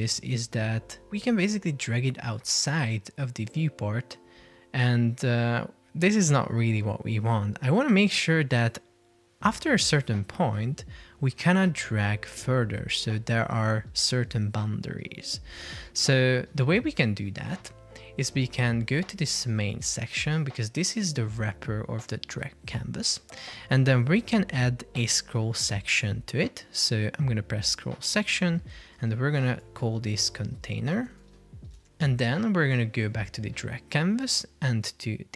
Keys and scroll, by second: 16.4 Escape.